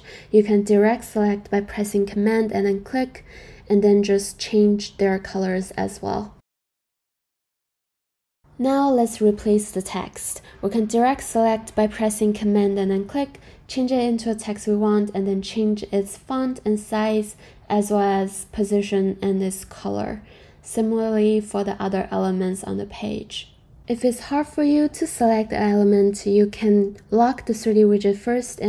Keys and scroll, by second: 4.5 super+v, 4.5 Return, 6.5 super+v, 7.0 Return, 12.2 super+v, 12.5 Return, 13.0-18.2 typing, 21.3 super+a, 21.5 BackSpace, 21.7 super+v, 21.9 Return, 28.5-28.6 typing.